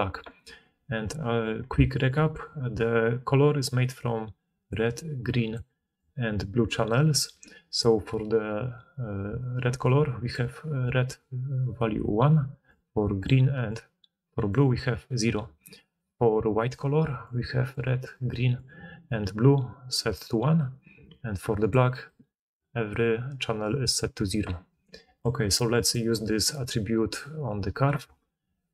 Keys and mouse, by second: 2.6-7.1 d, 9.1-10.7 d, 12.2 d, 12.5-14.5 d, 16.9-18.9 d, 19.8 d, 19.9 d, 21.0-22.7 d, 23.5 d, 23.6 d, 23.7 d.